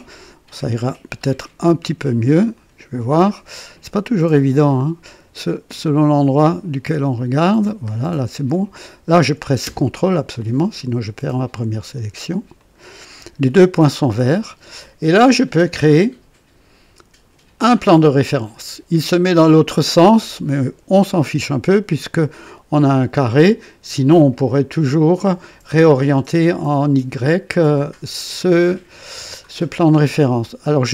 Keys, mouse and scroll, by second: 2.5 click, 3.2 scroll up 2, 7.1 click, 7.9-8.2 scroll down 1, 8.7-9.4 right drag, 12.6 ctrl+click, 17.6 click, 20.1-20.5 scroll down 2, 21.2 right click, 21.9-24.1 drag, 25.1-25.9 drag.